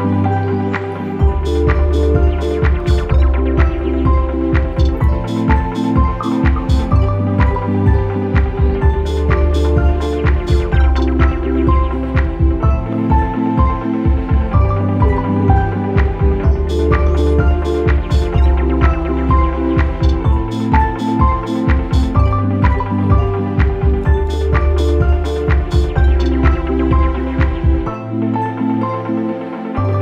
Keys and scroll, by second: 0.0 ctrl+d, 2.8 ctrl+=, 4.1 ctrl+=, 6.3 Delete, 10.8 Up, 11.0 Up, 11.2 Up, 12.3 space, 14.3 u, 17.5 Delete, 17.6 ctrl+-, 19.0 ctrl+-, 22.7 p.